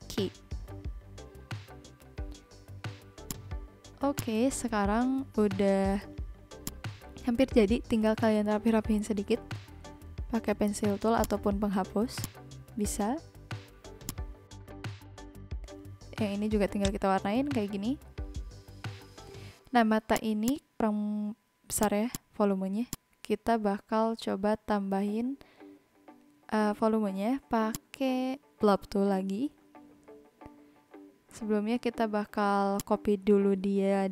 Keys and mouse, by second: 3.2 click, 3.7 n, 4.1 click, 6.6 click, 10.8 v, 11.2 click, 11.6 n, 12.1 click, 14.0 click, 16.5 v, 16.7 click.